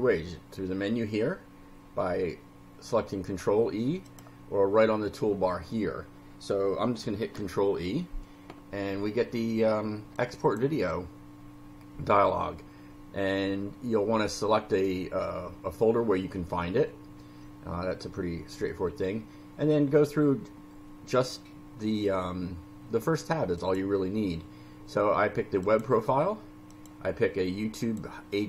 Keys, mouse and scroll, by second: 4.1 drag, 7.0 ctrl+e, 10.1 click, 23.6 click, 25.6 click, 26.7 click, 27.8 click.